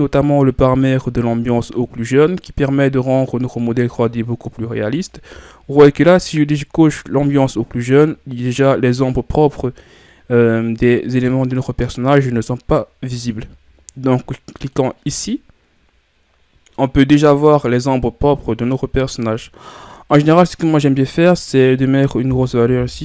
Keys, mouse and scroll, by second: 2.3 click, 3.4-4.4 middle drag, 4.4-5.1 ctrl+scroll down 2, 5.1 shift+scroll down 1, 5.4-6.2 scroll up 4, 7.3 click, 8.7-14.7 middle drag, 14.7 click, 17.9-23.0 middle drag.